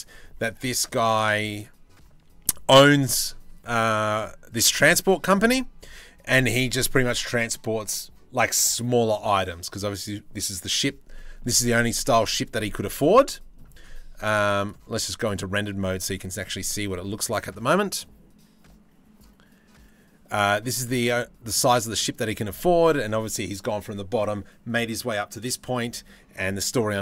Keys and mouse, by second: 0.1-1.3 middle drag, 2.1-4.5 middle drag, 10.8 middle click, 11.9 middle click, 12.8 middle click, 20.4-21.2 middle drag, 21.6 middle click.